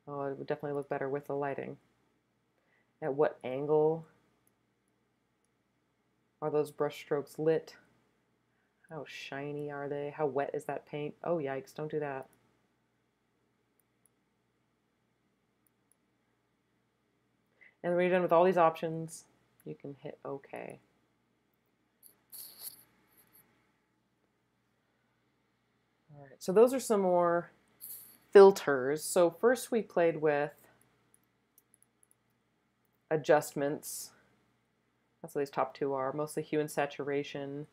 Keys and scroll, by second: 30.7 space, 31.2 space, 31.6 space, 32.6 space.